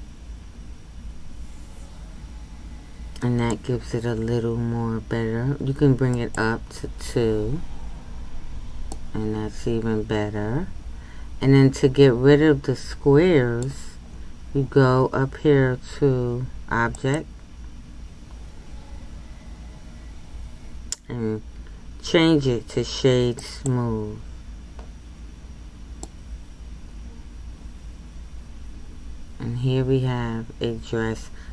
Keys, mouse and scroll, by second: 6.3-7.7 drag, 7.7-8.9 scroll up 1, 8.9-11.9 middle drag, 26.0-29.1 middle drag.